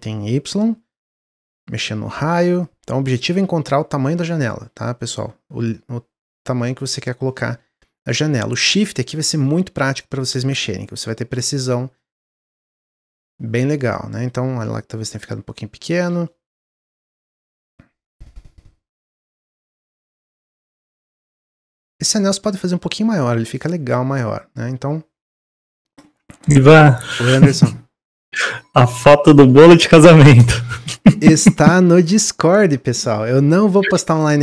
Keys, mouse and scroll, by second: 8.0-16.2 shift+drag, 16.2-18.0 middle drag, 18.0-22.7 shift+drag, 22.7-25.7 middle drag, 27.5-30.6 shift+drag.